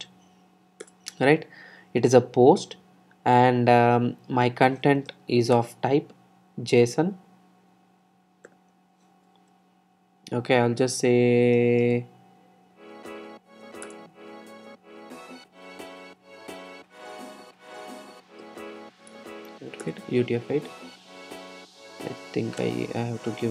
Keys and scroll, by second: 0.4 Return, 13.4 Return, 19.3 Return, 22.8 Return.